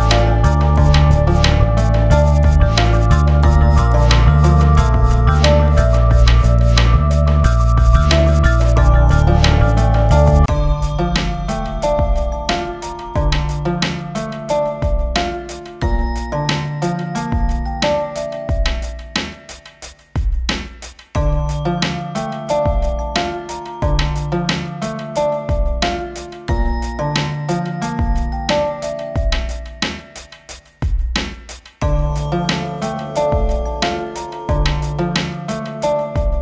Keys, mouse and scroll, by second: 1.0 click, 6.4 shift+Page_Down, 7.5 scroll up 1, 8.7-9.6 scroll down 1, 10.6 scroll down 1, 13.8 click, 14.9 F4, 15.6 scroll down 1, 16.8-22.6 drag, 22.6 ctrl+t, 23.7-24.5 typing, 24.0 click, 25.0 ctrl+r, 25.9 click, 27.0 F4, 27.6 click, 29.4 c, 30.2 click, 32.6 click, 33.6-36.4 drag.